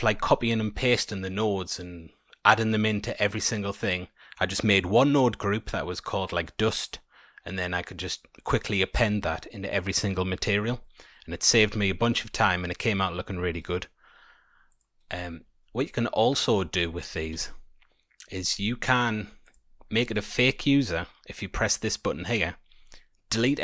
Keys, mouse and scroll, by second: 15.4-16.1 scroll down 1, 16.1 scroll down 2, 17.2 scroll up 1, 17.3 a, 19.4 click, 19.7-22.4 scroll up 12.